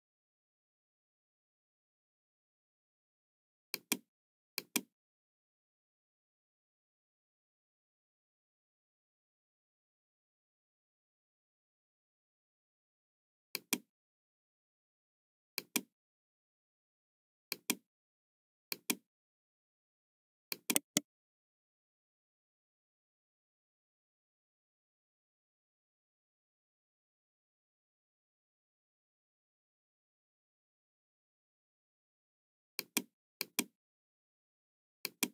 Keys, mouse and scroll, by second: 3.7 click, 4.5 click, 13.5 click, 15.5 click, 17.5 click, 18.6 click, 19.1-19.4 scroll down 1, 20.4 click, 20.7 right click, 32.7 click, 33.3 click, 35.0 click.